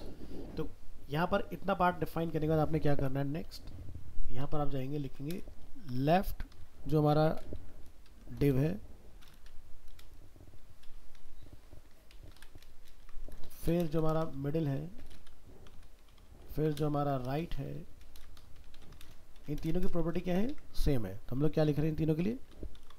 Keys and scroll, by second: 13.0 ctrl+c, 14.0 ctrl+v.